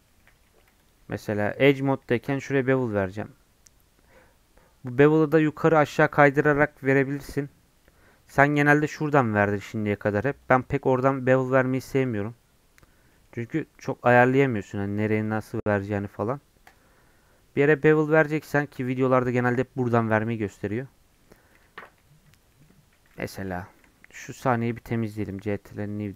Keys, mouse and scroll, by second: 0.0-0.3 scroll up 2, 0.1 middle click, 0.5 2, 0.8 alt+click, 1.6 middle click, 1.9 scroll up 3, 2.3 ctrl+b, 8.1-8.5 scroll down 1, 8.5 Tab, 8.6 scroll down 1, 8.7-10.1 middle drag, 10.1-13.1 drag, 13.1 middle click, 13.9-20.2 drag, 20.2 right click, 20.8 scroll up 1, 21.1 middle click, 21.2 scroll down 2, 21.6 Tab, 21.8 2, 22.2 Tab, 22.5 middle click, 22.9 x, 24.0 a, 24.8 ctrl+n.